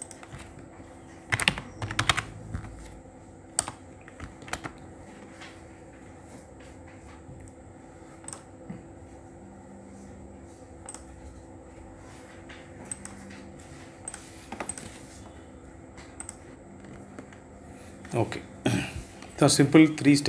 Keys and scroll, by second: 1.0-1.7 typing, 3.1 BackSpace, 4.1 ctrl+a.